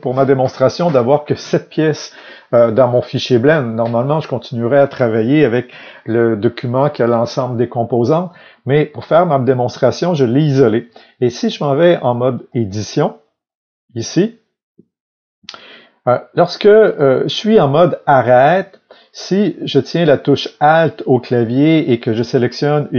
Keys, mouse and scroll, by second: 0.1-11.4 middle drag, 8.6 scroll up 1, 9.1-10.0 scroll down 1, 11.4-13.6 drag, 13.6-16.8 middle drag, 16.8 click, 18.0-22.3 middle drag, 22.3 alt+click.